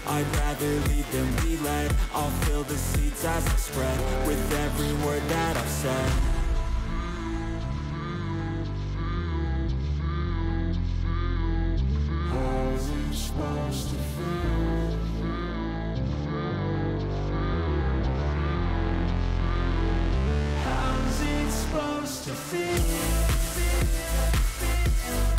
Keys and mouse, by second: 0.4 click, 2.8-4.5 drag, 5.8 click, 6.7 click, 7.5 click, 9.6-10.6 drag, 11.9 click, 12.3 shift+click, 12.8 click, 14.1 shift+click, 14.6 click, 15.5 shift+click, 17.3-18.9 drag, 20.0 click, 23.5-24.8 drag.